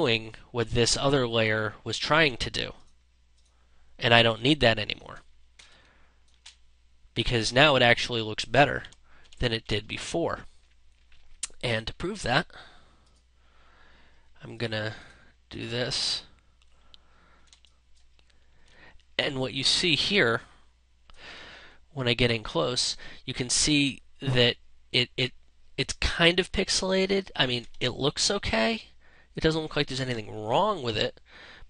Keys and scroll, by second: 5.1 ctrl+space, 8.7 ctrl+-, 17.0 ctrl+space, 27.2 space.